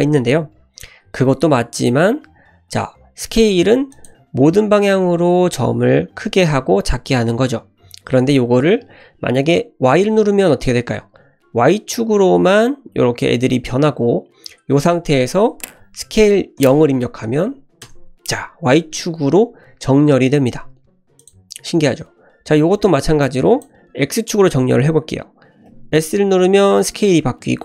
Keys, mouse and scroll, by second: 3.3 s, 5.1 s, 21.2 click, 23.2 click, 25.7 s.